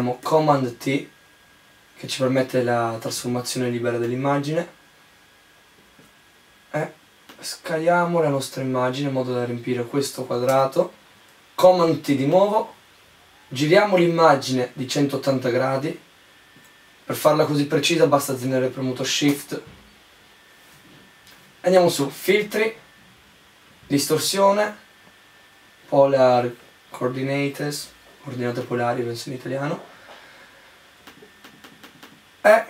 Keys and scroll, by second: 0.0 super+t, 10.2 Return, 11.1 super+t, 19.0 Return.